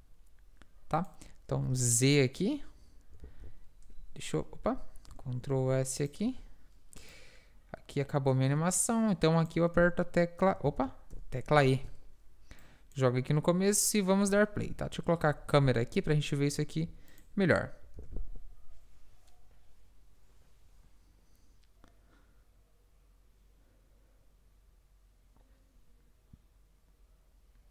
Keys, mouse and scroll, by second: 1.6 z, 3.3 alt+a, 4.6 alt+a, 4.6 F1, 4.6 Escape, 4.6 z, 5.2 ctrl+s, 9.8 s, 10.7 ctrl+z, 11.2 e, 11.7 ctrl+s, 13.3-14.7 drag, 14.7 KP_0, 15.5 shift+f, 18.0 alt+a.